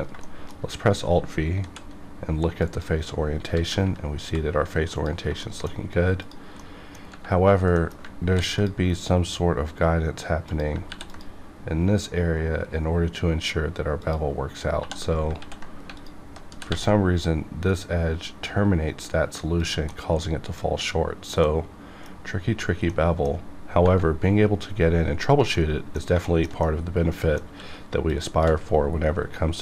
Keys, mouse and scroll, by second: 0.2 shift+middle click, 0.7 scroll up 1, 1.7 alt+v, 2.6 click, 3.5 alt+a, 4.3 alt+v, 4.9 click, 5.4 shift+middle click, 6.2 click, 6.6 middle click, 7.0 scroll down 1, 7.6 scroll down 1, 7.8 middle click, 8.3 ctrl+r, 8.6 click, 10.9 ctrl+r, 11.1 ctrl+click, 14.0 click, 14.8 2, 15.4 ctrl+x, 16.0 alt+click, 16.5 g, 16.9 g, 18.9 g, 19.6 click, 19.9-23.8 middle drag, 25.5 middle click, 26.6 middle click, 27.5 q, 28.1 shift+click, 29.2-29.6 scroll up 1.